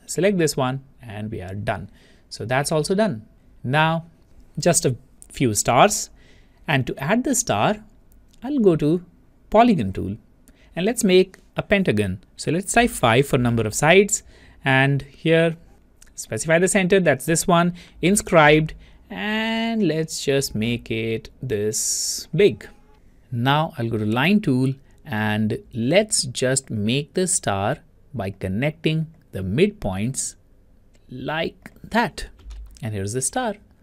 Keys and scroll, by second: 12.9 5.